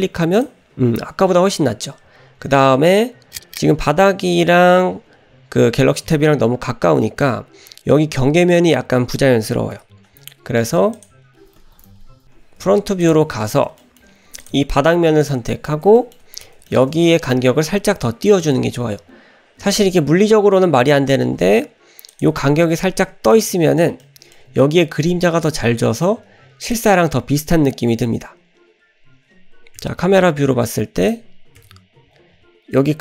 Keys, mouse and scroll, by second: 0.4 click, 9.7 KP_0, 11.1 click, 11.3-11.8 scroll up 2, 11.8 drag, 13.0 click, 13.0-13.8 scroll up 4, 13.8 shift+middle drag, 14.4 click, 14.6-15.2 scroll up 1, 15.2 click, 15.4 scroll up 1, 15.9 scroll up 3, 16.0 shift+middle click, 16.7 shift+middle click, 17.8-18.3 scroll up 1, 18.3 shift+middle drag, 19.1-19.7 scroll up 1, 21.2 g, 22.9-23.5 scroll down 2, 23.3-23.8 middle drag, 24.0-24.4 shift+middle drag, 24.6-25.1 scroll down 1, 26.9 click, 31.6 KP_0.